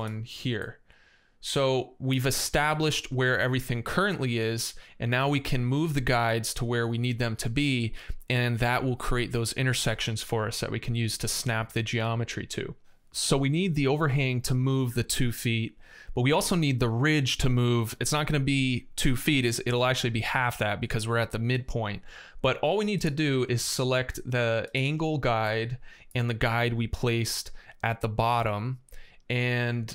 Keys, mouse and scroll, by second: 1.0 middle click, 1.2 middle click, 22.8 click, 24.5 click, 25.2 middle click.